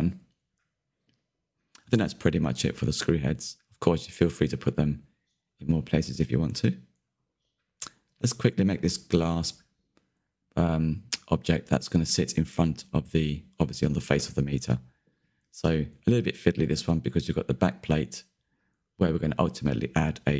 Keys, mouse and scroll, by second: 0.2 click, 0.4-1.2 scroll down 13, 1.2-2.8 middle drag, 2.8 click, 3.1 click, 3.5-4.3 middle drag, 4.3-4.7 scroll down 3, 4.7-7.5 shift+middle drag, 7.5 Delete, 8.2-8.9 middle drag, 8.9 click, 9.2 Tab, 10.8 alt+click, 11.8 shift+d, 12.7 Tab, 13.2 Tab, 14.6 p, 14.8 Tab, 15.9 click, 16.6-18.5 click, 18.5-20.3 drag.